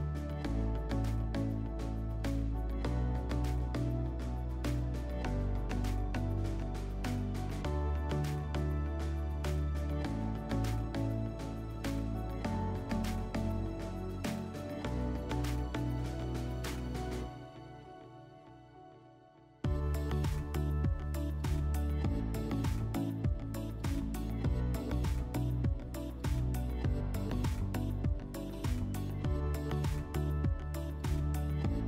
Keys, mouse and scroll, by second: 2.9 click, 4.5 click, 13.1 click, 14.1-15.4 drag, 17.8 click, 18.1-19.4 drag, 19.5-21.4 drag, 22.8 click, 24.0 click, 24.4-26.1 typing, 26.2 Return.